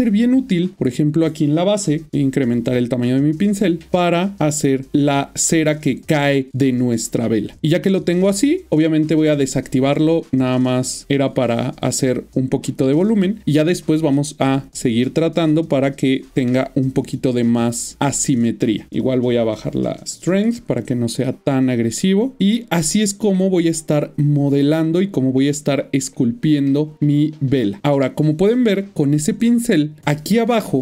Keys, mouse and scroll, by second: 2.1 typing, 2.5 click, 4.6 double click, 4.9 middle click, 7.9 click, 8.3 double click, 9.4 click, 11.0 double click, 11.1 click, 12.1 middle click, 13.5 ctrl+middle click, 13.8 click, 14.6 double click, 14.9 middle click, 15.4 click, 15.6 double click, 16.0 shift+middle click, 17.1 click, 17.4 double click, 17.9 click, 17.9 double click, 18.9 click, 21.2 double click, 22.9 double middle click, 24.8 ctrl+middle click, 26.1 shift+middle click, 27.8 middle click, 29.1 middle click, 29.3 ctrl+middle click.